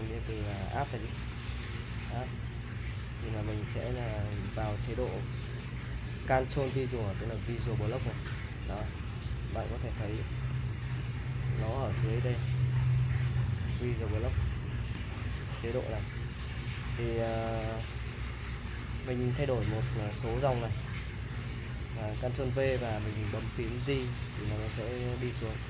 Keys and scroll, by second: 0.4 h, 0.9 l, 7.2 ctrl+v, 8.6-11.0 typing, 25.1-25.6 typing.